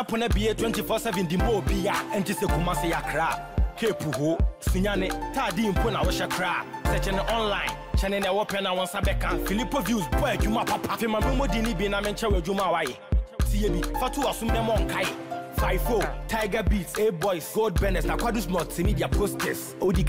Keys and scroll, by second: 5.6 alt+Delete, 7.3 ctrl+s, 12.8 ctrl+d, 16.4 ctrl+-.